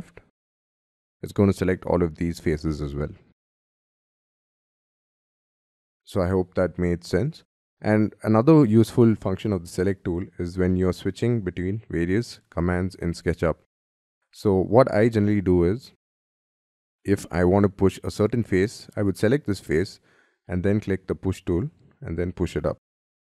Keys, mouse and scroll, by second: 2.6 middle click, 10.7 middle click.